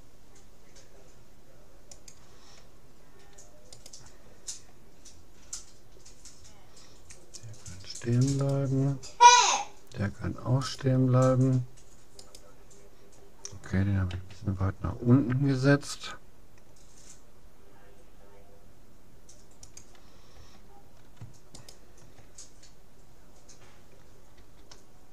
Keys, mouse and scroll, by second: 3.9-5.5 right drag, 8.5-10.1 right drag, 10.7-13.9 right drag, 14.1 a, 15.5 g, 21.7-23.3 right drag, 24.4 g.